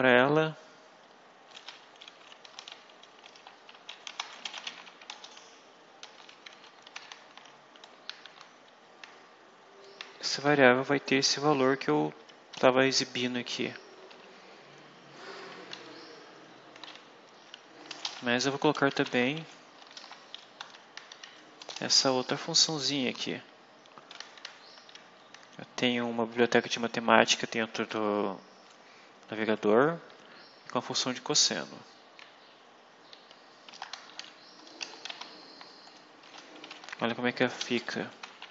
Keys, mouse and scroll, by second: 2.1-6.0 typing, 6.8 ctrl+v, 10.1 Left, 10.5 Home, 10.9 Right, 14.0 Home, 14.2 Right, 15.6 Left, 17.6-22.9 typing, 21.0 End, 24.0 Left, 30.0 Right, 33.0 End, 33.6 BackSpace, 34.1 ., 34.7 BackSpace, 35.0 ;, 36.1 Return, 36.3-38.5 typing.